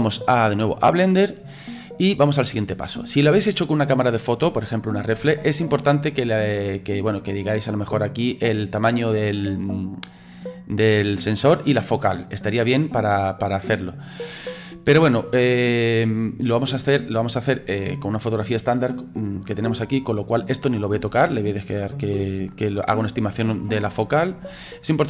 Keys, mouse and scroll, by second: 8.0-9.0 drag, 11.4 click, 13.9 click.